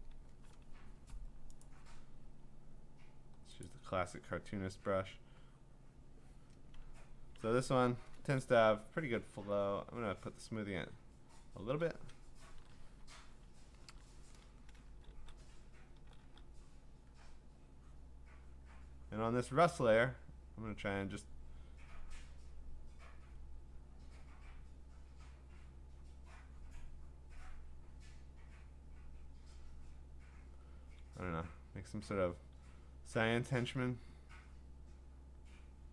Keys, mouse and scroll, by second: 0.1 ], 1.6 right click, 2.7-3.3 scroll, 3.6 click, 6.0 click, 7.4 ctrl+z, 9.9 click, 10.9 click, 11.0 click, 11.6 [, 12.6 ctrl+z, 13.9 ctrl+z, 14.8 [, 15.1 [, 15.9 [, 16.2 [, 16.9 click, 18.0 click, 18.5 click, 18.8 click, 19.3 click, 19.4 click, 19.8 click, 20.3 click, 20.6 click, 20.9 click, 21.4 click, 21.6 click, 22.1 click, 22.4 click, 23.0 click, 23.7 click, 24.4 click, 24.7 click, 25.8 click, 26.2 click, 26.8 click, 28.3 click, 28.9 click, 29.2 click, 30.0 click, 32.3 click, 33.5 click, 34.0 click, 34.3 click, 35.2 click, 35.4 click.